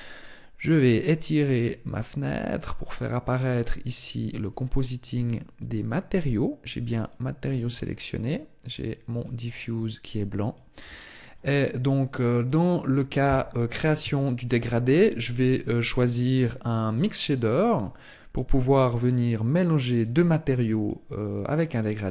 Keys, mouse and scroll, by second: 1.3 click.